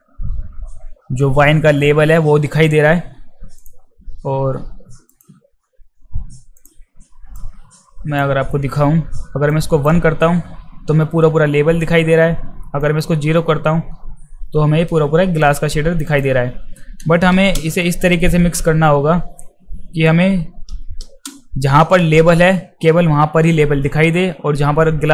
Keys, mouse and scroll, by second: 3.6 click, 5.1 click, 6.6 click, 7.4 click, 9.5-9.8 drag, 12.8 drag, 16.1 click.